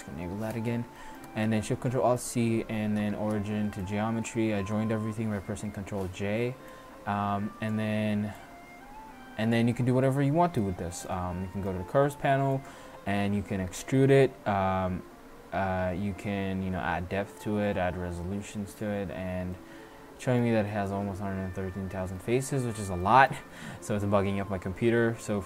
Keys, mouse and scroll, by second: 0.2 n, 0.7-1.3 middle drag, 6.7-9.8 drag, 10.0-10.4 middle drag, 12.6-15.6 drag, 15.6 middle click, 20.2 middle click, 20.5 middle drag, 22.7-23.1 middle drag, 25.3-25.4 middle drag.